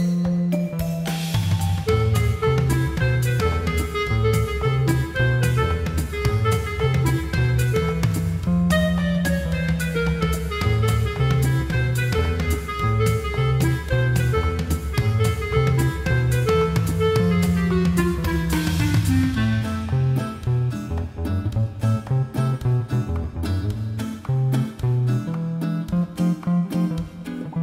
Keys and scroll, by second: 6.7 scroll.